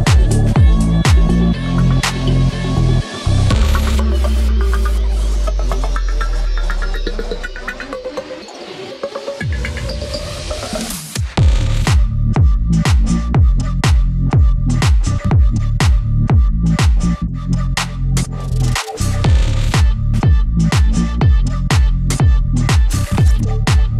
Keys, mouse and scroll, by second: 1.4 Tab, 3.6 Tab, 3.8 shift+click, 4.3 b, 4.6 scroll up 1, 5.0 click, 5.6-6.0 scroll up 1, 6.0-9.8 drag, 9.8 scroll up 1, 10.8 click, 11.8 scroll up 1, 12.2-13.4 drag, 13.4 scroll up 1, 14.0-15.8 drag, 15.8 scroll up 1, 16.3 scroll down 1, 17.4 scroll up 1, 17.7 click, 19.1 ctrl+right click, 19.8-21.3 drag, 21.2 Tab.